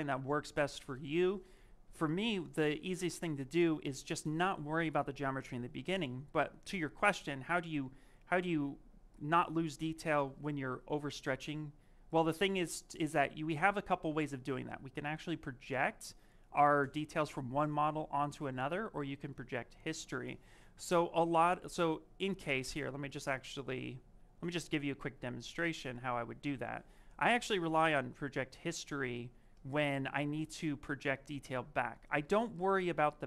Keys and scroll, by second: 21.6 s, 24.6 ctrl+d, 25.8 s, 29.0 s.